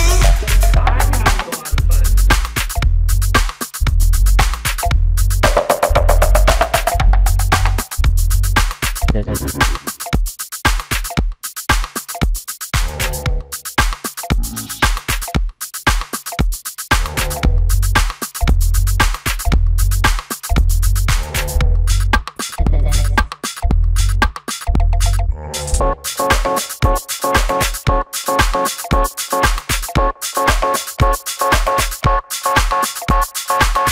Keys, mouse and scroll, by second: 3.9 shift+middle click, 8.0 space, 11.7 shift+v, 17.8 shift+v.